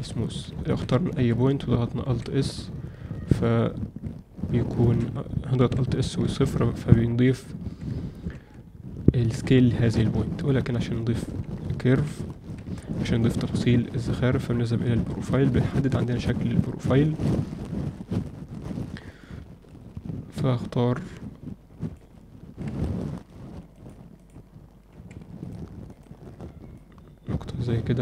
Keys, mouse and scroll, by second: 0.2 alt+shift+middle click, 0.6 ctrl+alt+middle click, 0.8 z, 2.0 alt+s, 5.5 alt+s, 6.7 z, 7.2 Tab, 7.7 Tab, 8.3 Tab, 11.7 ctrl+middle click, 12.2 alt+shift+middle drag, 12.7 ctrl+alt+middle click, 14.6-17.2 drag, 21.9-23.8 drag, 24.2-25.1 drag, 25.8 click, 26.8-28.0 drag.